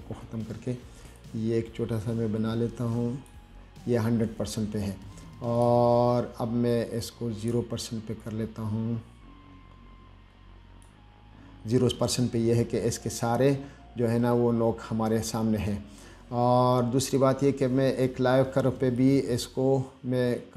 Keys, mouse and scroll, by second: 1.4-3.5 drag, 5.8 click, 7.3 click, 8.5-11.1 drag, 12.4-12.8 scroll up 1, 13.2-13.5 scroll up 1, 14.0 middle click, 16.0-16.7 scroll down 2, 17.0-17.3 scroll down 2, 19.2-20.5 drag.